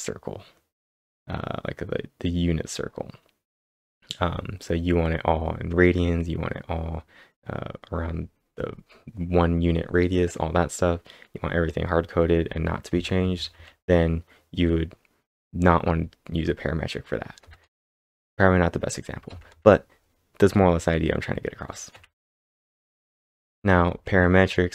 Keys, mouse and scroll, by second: 12.9 scroll down 1, 12.9 k, 13.1 k, 13.3 k, 13.5 k, 17.4 scroll down 1, 17.4 k, 17.6 k, 19.3 k, 19.5 k, 20.6 typing, 21.9-24.7 typing.